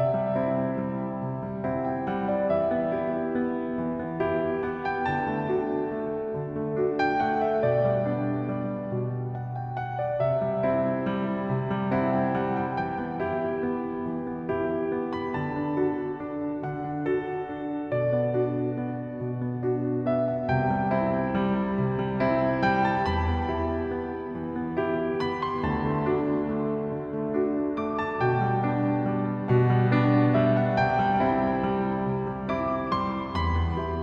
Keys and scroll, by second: 1.6-17.4 typing, 2.5 ctrl+z, 3.0 ctrl+z, 10.0 ctrl+z, 16.9 ctrl+z, 19.6-23.5 typing.